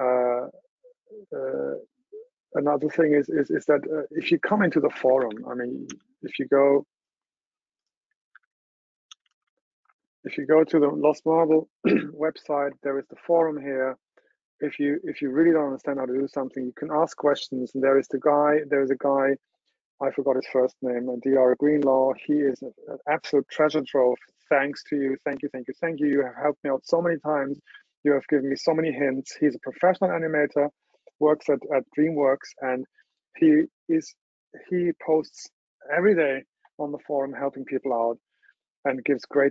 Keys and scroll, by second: 8.5 super+t.